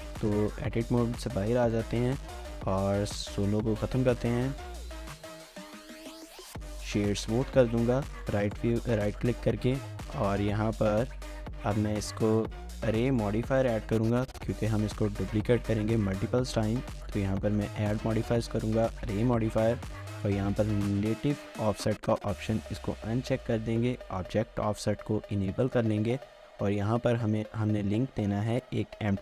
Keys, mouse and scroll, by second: 0.7 Tab, 1.5 shift+middle click, 3.7 shift+middle click, 5.6 right click, 7.8 scroll down 1, 8.1 shift+middle click, 28.9-29.2 scroll down 2.